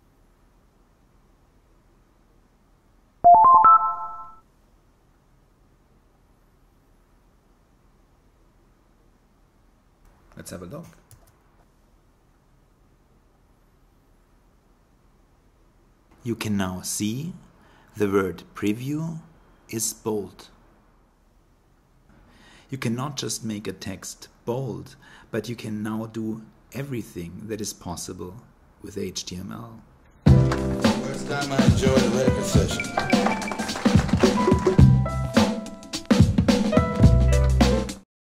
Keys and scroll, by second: 2.4 super+s, 5.3 shift+super+e.